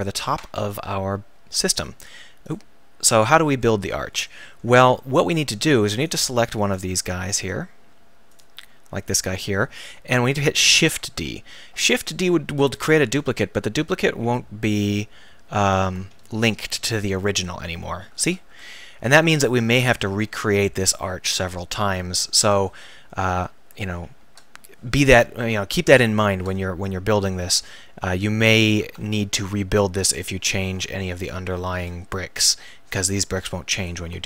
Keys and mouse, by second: 1.8-3.0 right drag, 7.5 Tab, 10.8 shift+d, 15.7-17.5 drag, 17.5-18.6 Tab, 19.1 Tab, 28.8 shift+d, 31.7 KP_1, 32.7-34.2 drag.